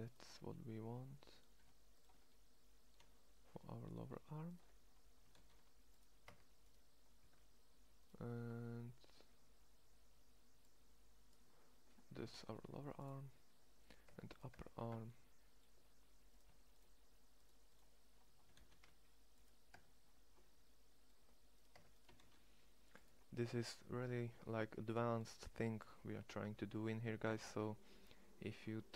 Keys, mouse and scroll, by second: 5.2 shift+s, 6.1 Tab, 7.0 Tab, 12.0 shift+s, 13.9 Tab, 14.5 Tab, 17.3 shift+right click, 18.4 shift+s, 19.6 Tab, 21.6 Tab, 22.0 shift+s, 27.6 middle click.